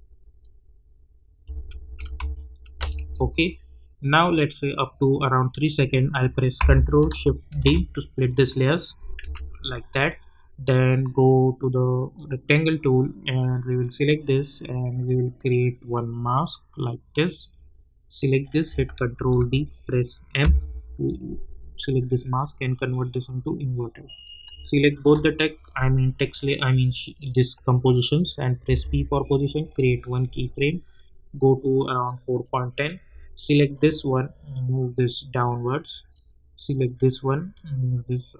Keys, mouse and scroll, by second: 1.4 space, 4.2-7.5 drag, 7.5 ctrl+shift+d, 9.2 v, 10.1-18.3 drag, 19.1 ctrl+d, 20.4 m, 22.9 click, 24.9 shift+click, 28.6 p, 29.6-38.3 drag.